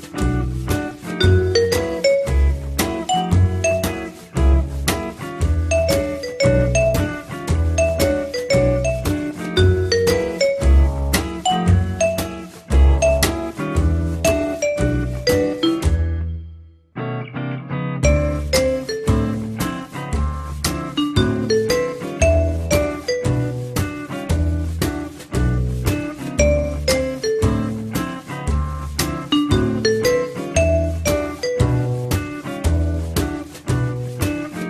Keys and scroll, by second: 4.9 ., 7.4 9, 8.0 Return.